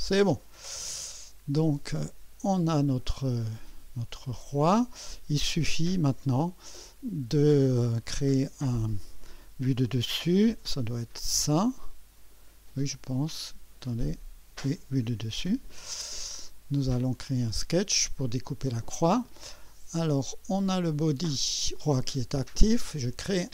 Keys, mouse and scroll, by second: 0.6 scroll down 1, 1.0 scroll up 1, 1.6-2.3 right drag, 2.4-6.0 drag, 6.8-9.1 drag, 10.7 4, 11.9-12.5 right drag, 13.3-14.1 right drag, 14.1-15.0 drag, 15.5 4, 16.0 scroll up 1, 16.5-17.1 right drag, 17.3 scroll up 1, 17.7-18.4 right drag, 20.7-21.1 scroll up 1.